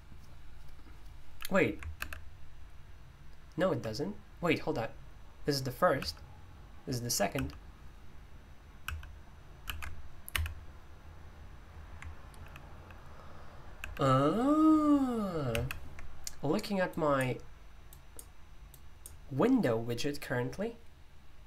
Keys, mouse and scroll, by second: 1.9 super+h, 3.7 super+l, 5.9 super+l, 8.8 super+l, 12.3 super+h, 12.7 super+h, 13.7 super+h, 18.1-19.6 drag.